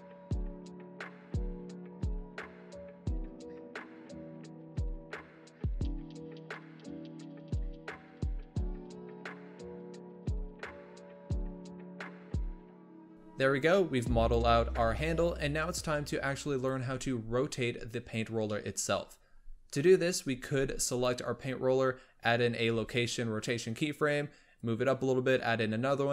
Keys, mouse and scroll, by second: 0.2 click, 1.9 shift+middle click, 2.1 e, 2.6 scroll down 1, 2.7 shift+middle click, 2.8 g, 4.6 shift+right click, 4.8 click, 6.9 scroll up 2, 6.9 shift+middle click, 7.1 e, 7.7 scroll down 1, 7.8 shift+middle click, 8.5 shift+right click, 8.8 click, 9.7-10.1 scroll up 2, 10.1-11.6 drag, 11.6 scroll down 5, 11.8 shift+middle click, 11.9 e, 12.4-13.0 scroll down 3, 12.5 shift+middle click, 12.6 g, 13.0 Tab, 15.1 Tab, 15.6 g, 16.7 Tab, 18.4-18.9 shift+middle drag, 18.9-20.8 scroll up 4, 20.8 click, 24.5-26.1 drag.